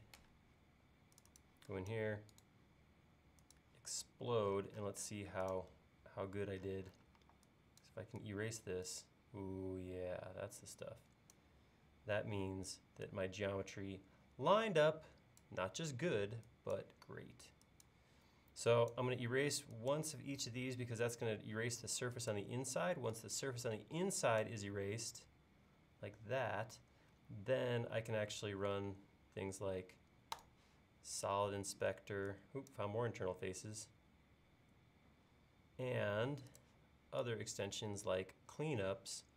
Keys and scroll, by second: 0.0-0.1 typing, 7.2 e.